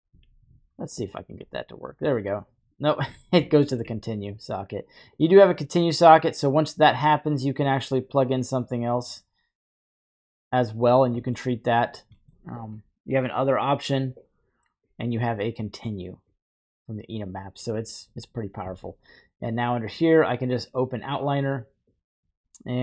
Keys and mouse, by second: 1.0-1.5 alt+drag, 1.0 typing, 3.7 ctrl+drag, 5.3-6.4 drag, 7.7 middle drag, 9.0-10.4 drag, 11.3 middle click, 12.2 middle click, 13.9-14.9 drag, 15.5-16.3 drag, 16.7-17.3 drag, 19.4-20.8 drag.